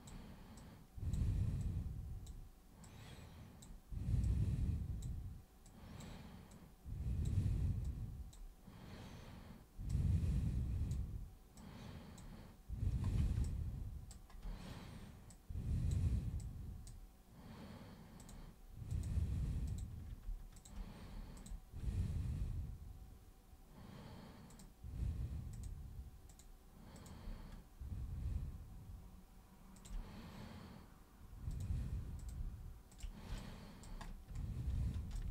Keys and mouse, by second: 0.5 super+click, 1.6 super+click, 2.8 super+click, 4.2 super+click, 5.6 super+click, 6.5 super+click, 7.8 super+click, 9.9-10.9 super+drag, 11.5 super+click, 13.4 alt+super+click, 15.2 super+click, 16.4 super+click, 18.2 super+click, 18.8 super+click, 19.6 super+click, 20.5 shift+super+click, 21.3 shift+super+click, 24.5 super+click, 25.5 super+click, 26.3 super+click, 26.9 super+click, 29.8 shift+super+click, 31.5 super+click, 32.1 super+click, 32.8 shift+super+click, 33.3 alt+super+click, 35.1 alt+super+click.